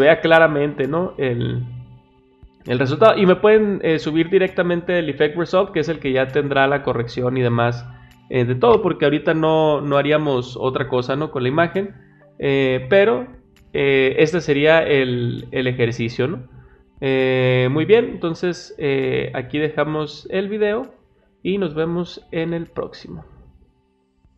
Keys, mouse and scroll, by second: 3.6 click, 6.2 click, 24.3 click.